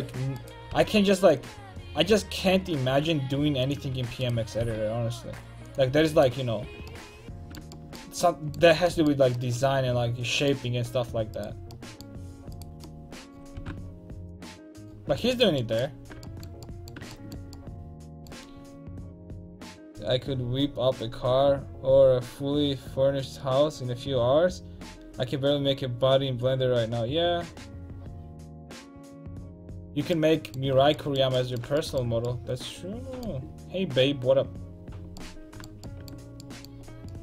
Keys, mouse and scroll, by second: 0.4 right click, 0.7 g, 4.0 a, 4.3 click, 4.6 g, 5.9 a, 7.8 middle click, 11.4-13.1 right drag, 13.1 middle click, 13.6 g, 14.6 a, 14.9 middle click, 32.0 middle click.